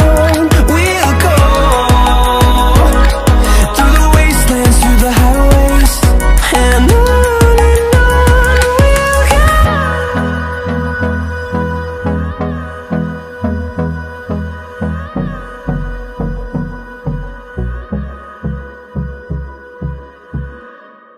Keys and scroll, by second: 0.0-0.3 typing.